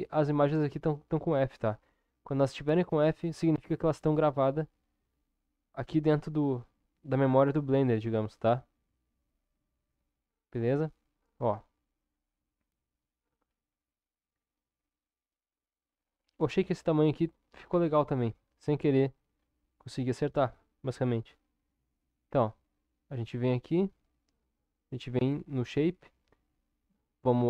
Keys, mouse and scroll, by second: 10.5 Tab, 17.7 Tab, 22.3 Tab, 24.6 click.